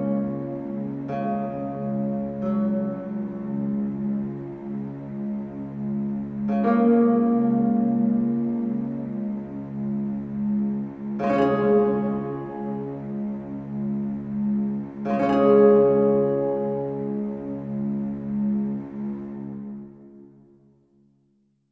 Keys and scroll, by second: 7.4 ctrl+z.